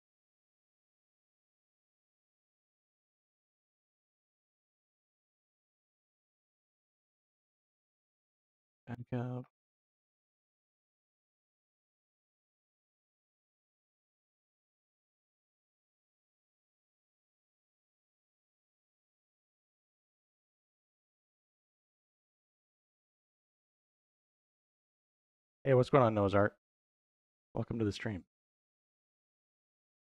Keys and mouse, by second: 0.2-2.8 middle drag, 15.3 middle click, 16.6-17.8 drag, 18.7 middle click, 20.2 click, 22.2 middle click.